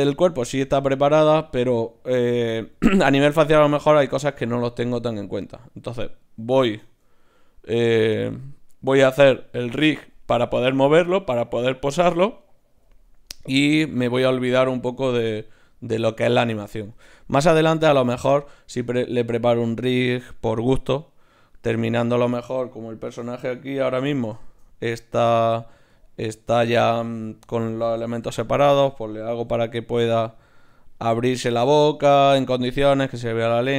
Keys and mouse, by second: 5.9-12.3 middle drag, 16.9-22.0 middle drag, 22.0-24.0 right drag, 24.0 KP_3, 24.4-25.9 middle drag, 25.9-27.3 drag, 25.9 right click, 27.4 click, 27.6 click, 28.2 ., 29.5 r, 30.9-33.7 middle drag.